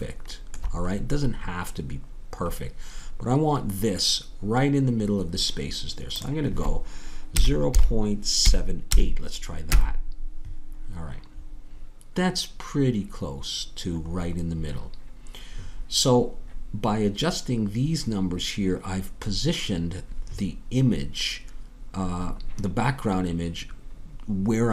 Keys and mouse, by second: 2.2-3.9 middle drag, 14.1-16.1 middle drag.